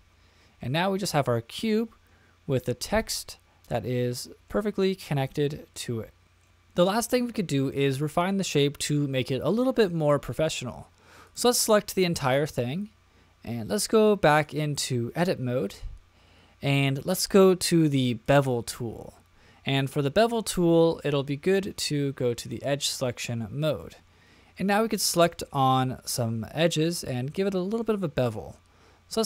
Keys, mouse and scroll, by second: 1.2-4.5 middle drag, 4.9-6.5 middle drag, 8.2-9.1 scroll down 1, 9.1-10.5 middle drag, 11.2 click, 13.9 click, 14.3-15.2 drag, 18.2 click, 22.4 click, 25.3-27.1 middle drag, 27.8-28.3 shift+middle drag.